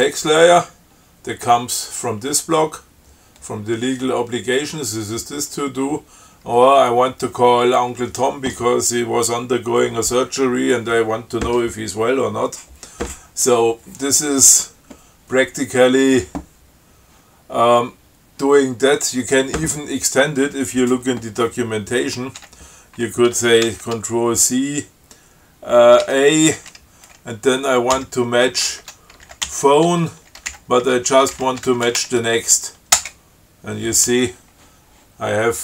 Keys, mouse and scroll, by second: 0.9-1.5 scroll up 4, 7.1 scroll down 2, 22.7 q, 23.9 ctrl+c, 26.3 a, 28.2-32.8 typing, 33.2 Return.